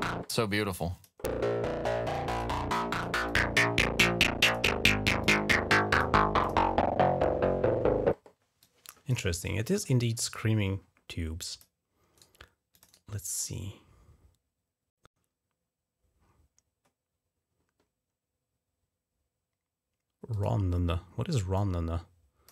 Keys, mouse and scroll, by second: 0.4 click, 2.0 click, 2.6 click, 3.1 click, 4.3 click, 5.1 click, 5.7 click, 6.3 click, 8.5 click, 9.3 click, 10.1-11.7 drag, 12.6 click, 20.2 click, 20.3 right click, 21.4 click.